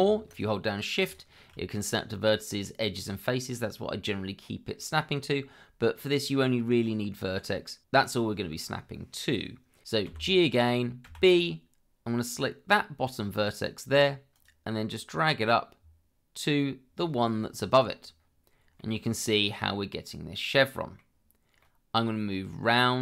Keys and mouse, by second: 10.1 g, 11.0 b, 14.3 click, 17.7 click, 18.8-21.0 middle drag, 21.6-23.0 middle drag.